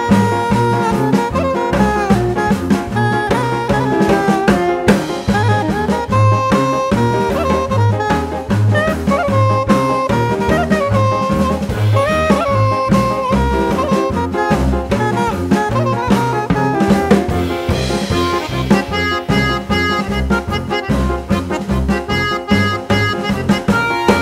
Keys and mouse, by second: 0.6-2.5 drag, 3.0 click, 4.7-5.7 drag, 7.1 click, 8.1 click, 9.4 click, 10.6 click, 14.3 click, 15.3 click, 16.9 click, 18.1 click, 18.1 right click, 20.3 click, 22.1 click.